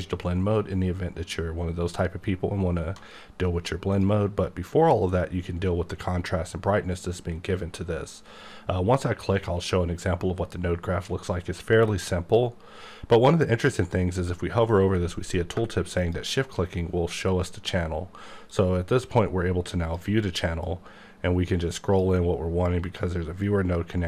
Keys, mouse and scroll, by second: 3.9 click, 16.0 shift+click, 18.5 click, 20.7 click, 22.6 click.